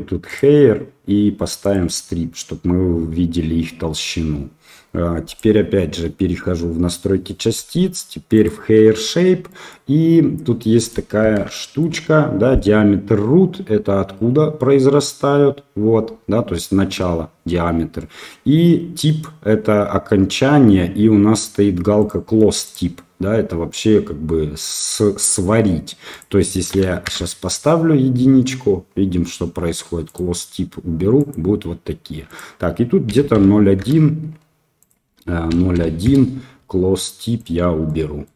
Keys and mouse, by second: 0.3 click, 1.6 click, 8.3 click, 9.4 middle click, 10.6 middle click, 11.5 shift+drag, 22.0 click, 22.6-27.5 drag, 37.8 middle click.